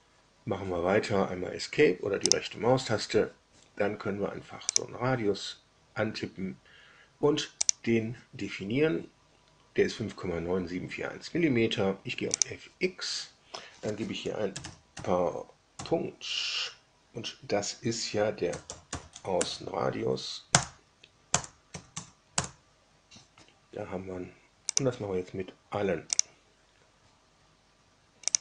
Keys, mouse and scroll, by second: 2.2 right click, 4.6 click, 7.6 click, 12.3 click, 14.2-15.7 typing, 18.2-19.3 typing, 19.3 Down, 20.5 Return, 21.2 Return, 21.6 Tab, 21.9 Tab, 22.2 Return, 24.6 click, 26.2 click, 28.2 click.